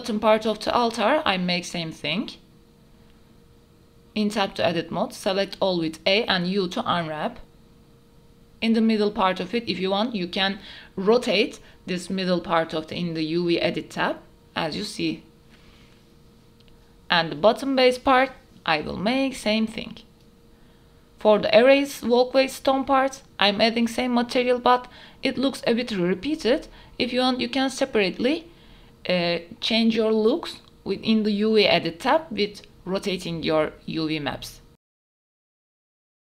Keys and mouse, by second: 0.0 KP_0, 1.0 click, 2.4-2.7 drag, 2.7 middle click, 3.2 KP_Decimal, 4.9 Tab, 5.1 a, 5.8 u, 7.4 Tab, 7.7-10.2 middle drag, 10.8 middle click, 11.4 middle click, 11.7 middle click, 12.3 middle click, 13.0 middle click, 13.2 middle click, 13.6 middle click, 14.1 Tab, 18.1 middle click, 18.5 click, 18.9 Tab, 19.1 a, 19.1 u, 19.5 Tab, 19.9 click, 20.2 shift+click, 21.0 click, 21.2 right click, 21.6 middle click, 22.7 KP_0, 23.2 a, 23.4 a, 24.6 click, 26.1-26.6 middle drag, 27.0-27.4 shift+middle drag, 27.6 middle click, 28.2 Tab, 28.6 a, 29.0 shift+middle click, 29.8 u, 31.4 Tab, 31.7-32.3 drag, 31.7-32.3 right drag, 34.3 click, 34.3 right click, 35.0 click, 35.0 right click, 35.3 KP_0, 35.6 click, 35.8 Tab, 35.8 click, 36.1 l.